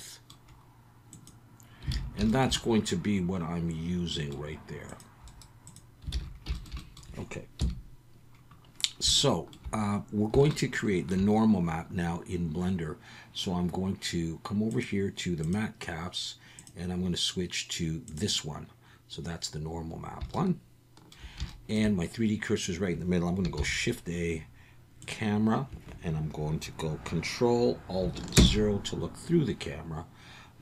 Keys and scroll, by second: 1.9 alt+a, 6.1 alt+a, 7.6 KP_1, 23.6 shift+a, 28.4 ctrl+alt+KP_0.